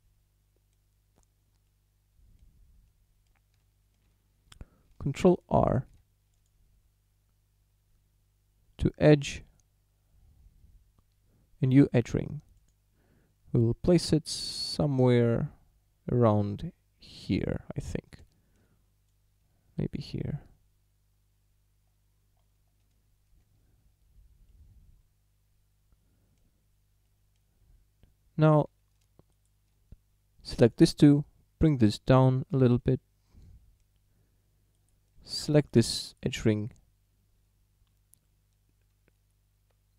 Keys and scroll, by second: 5.8 ctrl+r, 35.2 a.